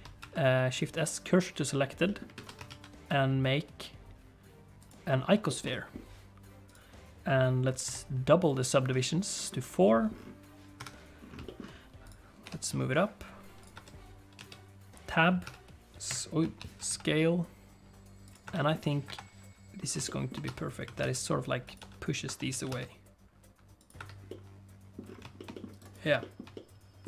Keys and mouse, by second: 0.2 shift+s, 2.0 click, 2.3 alt+a, 5.4 shift+click, 5.7 click, 7.8 click, 9.9 click, 10.7 KP_1, 11.5 shift+middle click, 12.0 click, 12.4 g, 13.7 Tab, 14.3 a, 15.4 s, 16.4 ., 16.7 s, 18.4 Tab, 18.5 click, 19.0 KP_7, 20.0 shift+click, 20.4 Tab, 20.8 a, 21.0 s, 21.8 Tab, 22.2 Tab, 22.5 a, 22.7 s, 23.9 Tab, 24.2 middle click, 25.3 shift+middle click, 25.5 middle click, 25.7 right click, 26.2 shift+middle click, 26.5 middle click.